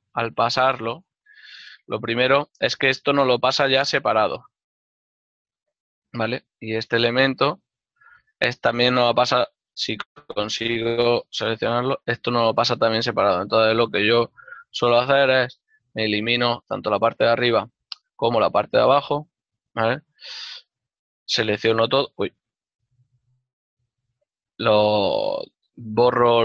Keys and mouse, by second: 1.5 right click, 2.2 l, 4.9 g, 8.6 right click, 8.8 g, 9.0 right click, 9.7 g, 11.1 right click, 11.6 l, 13.9 g, 16.2 x, 16.7 click, 17.1 middle click, 20.1 l, 23.9 a, 24.5 w.